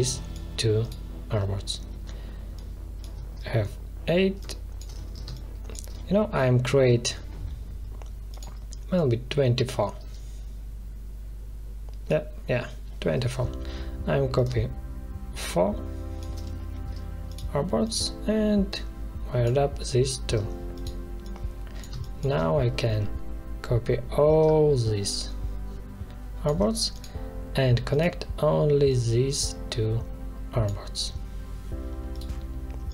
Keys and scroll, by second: 5.2 space, 21.8 space.